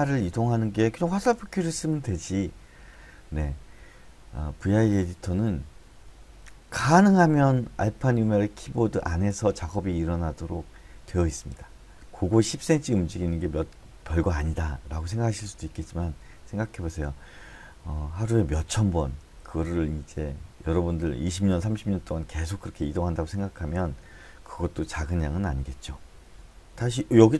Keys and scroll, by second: 26.3-27.3 typing.